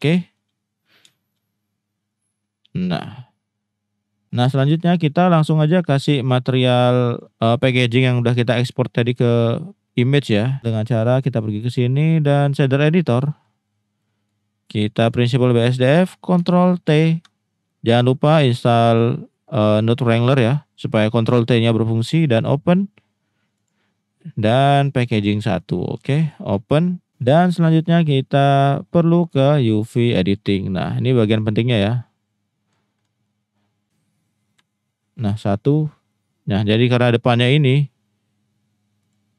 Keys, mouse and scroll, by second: 0.1 shift+middle drag, 1.1 shift+middle drag, 2.2-4.2 drag, 5.5-7.2 drag, 7.7 shift+middle drag, 14.0 middle click, 14.7 middle click, 15.0 drag, 15.6 click, 16.8 ctrl+t, 17.6 middle click, 18.6 click, 19.3 click, 22.3 click, 34.5 KP_1, 36.1 middle click, 39.0 click.